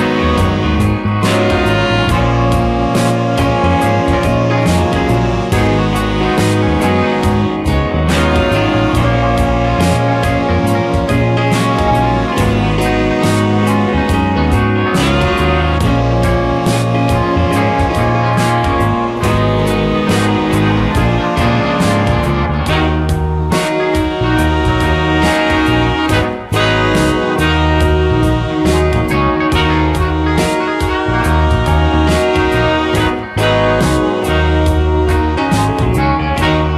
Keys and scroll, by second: 1.3 space, 7.4 space, 15.0 space, 20.0 space, 25.0 space, 29.7 space, 31.3 space.